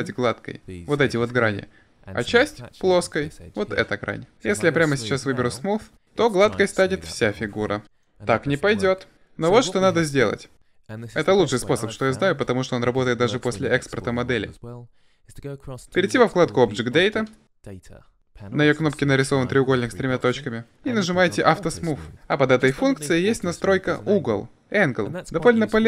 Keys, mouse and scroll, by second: 5.4-6.4 drag, 7.0 middle click, 18.1 click, 21.6 click.